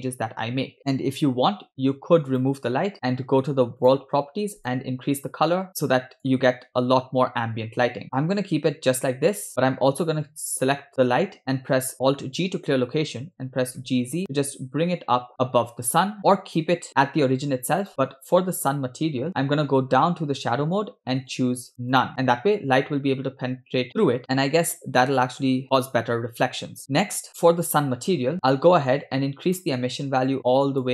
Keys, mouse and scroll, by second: 2.6 click, 3.9 click, 4.7 click, 9.6 click, 11.5 click, 12.5 alt+g, 13.4 g, 17.9 click, 19.4 click, 19.4-21.2 scroll down 8, 21.3 click, 21.8 click, 26.9 scroll down 3, 27.7 click, 28.6 scroll up 2, 29.6 click.